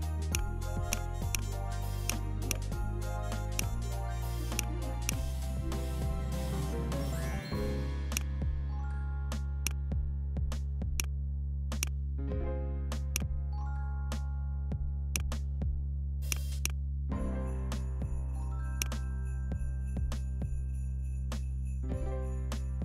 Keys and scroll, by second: 17.0 Up, 17.5 Up, 17.7 Up, 17.9 Up, 18.0 Up.